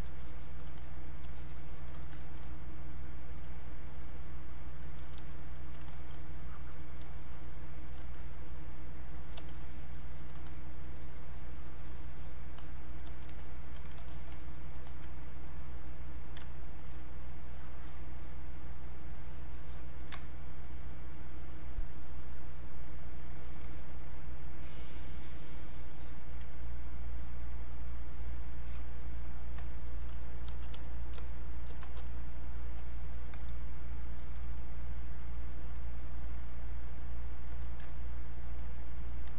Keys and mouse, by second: 1.4 shift+click, 3.4 click, 7.2 shift+click, 8.1 click, 8.9 click, 9.5-12.6 shift+drag, 12.6 click, 14.1 alt+click, 14.4 click, 14.9 alt+click, 16.8-19.1 ctrl+drag, 19.1-22.9 ctrl+drag, 27.4 click, 32.7-36.3 drag, 36.3-37.6 drag.